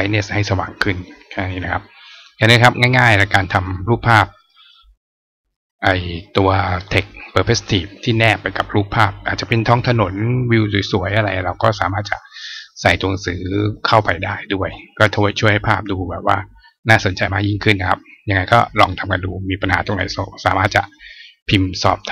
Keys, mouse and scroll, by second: 21.7 click.